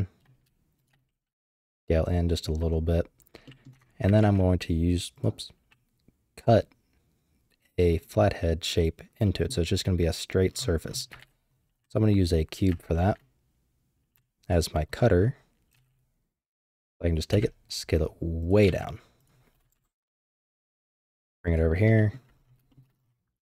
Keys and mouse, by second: 0.8 typing, 3.4 click, 3.7 Tab, 4.3 ctrl+s, 7.9 middle click, 9.2 middle click, 11.2 shift+a, 13.0 shift+a, 15.7 g, 17.3 s, 18.6 g, 19.7 KP_7, 20.6 g, 22.0 shift+middle click, 22.7 shift+middle drag, 23.4 g.